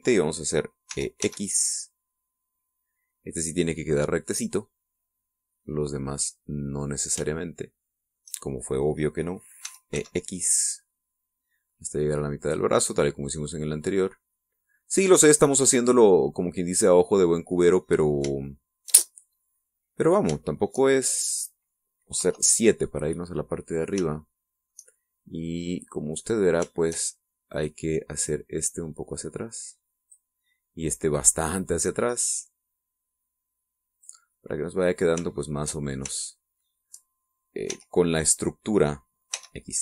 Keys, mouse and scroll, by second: 1.8 e, 2.1 x, 7.7 click, 8.2 shift+middle click, 10.5 e, 10.8 x, 13.3 click, 14.1-16.0 drag, 16.3-19.3 middle drag, 19.3-21.2 shift+middle drag, 21.3-22.7 shift+middle drag, 23.1 KP_7, 25.0 shift+middle click, 28.4 click, 29.2-31.2 drag, 32.0 right click, 32.5-35.1 drag, 35.2-36.2 middle drag, 36.7 shift+middle click, 37.1 shift+middle click, 38.6 e.